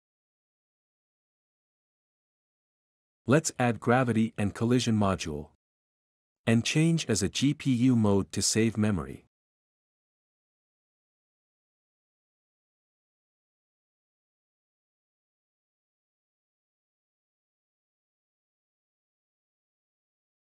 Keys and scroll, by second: 0.0-3.8 typing, 2.3 Escape, 7.1-8.2 typing, 12.9-13.5 typing, 18.5 typing.